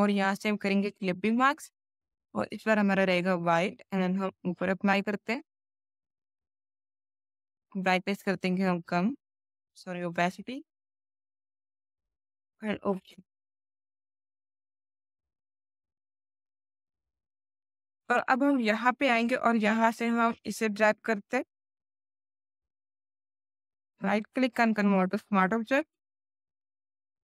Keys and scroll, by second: 2.5 alt+x, 3.0 alt+x.